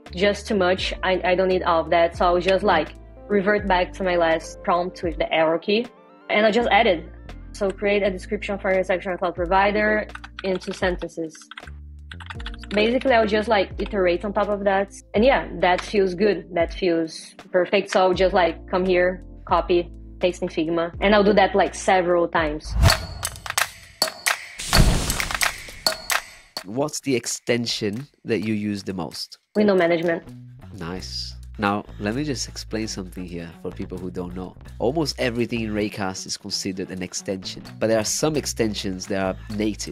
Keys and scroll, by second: 2.5 Up.